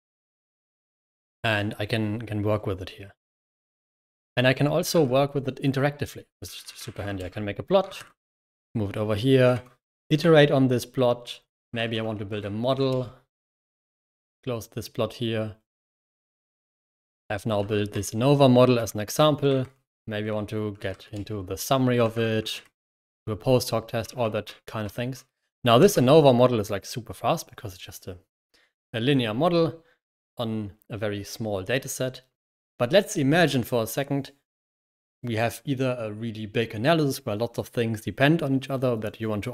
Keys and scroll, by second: 4.1 Escape, 4.8 0, 6.0-7.2 typing, 7.9 super+l, 9.4 super+h, 9.4-12.6 typing, 11.7 Escape, 12.7 ctrl+Return, 13.3 super+l, 13.8 super+q, 15.7 ctrl+Return, 16.3-25.4 typing, 17.5 ctrl+l, 18.6 ctrl+h, 21.0 Return, 25.7 ctrl+Return.